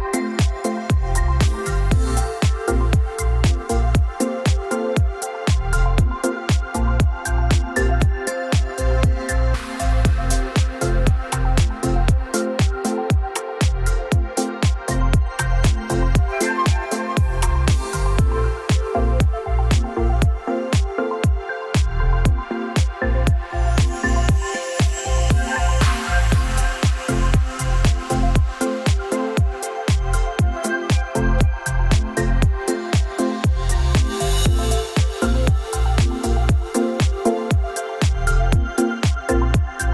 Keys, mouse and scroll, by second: 4.8 click, 5.2-5.7 scroll down 2, 5.7-6.5 scroll up 9, 6.5 scroll, 6.6 scroll up 4, 8.8-9.2 scroll down 2, 9.4-9.9 scroll, 9.9 o, 11.2 F3, 12.9 middle click, 12.9 middle click, 13.0 middle click, 13.5 middle click, 13.6 middle click, 16.0 click, 17.2 s, 18.7 ctrl+click, 19.7 ctrl+click, 21.3-22.4 ctrl+drag, 23.4 m, 25.1-26.5 drag, 27.1 click, 29.3 F3, 29.9 middle click, 29.9 middle click, 30.0 middle click, 30.0 middle click, 30.9 click, 35.6 click, 36.7 F3, 36.9-37.8 scroll down 9, 37.8-38.4 scroll, 37.8 o, 38.4 click, 39.3 click, 39.8 click.